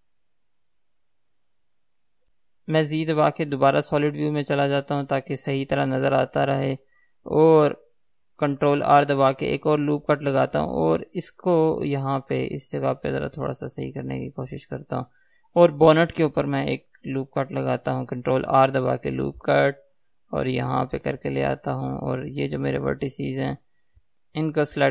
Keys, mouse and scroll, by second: 0.4 g, 2.3 click, 4.5 z, 9.0 ctrl+r, 14.5 click, 17.4 ctrl+r, 21.3 click, 24.0 KP_3.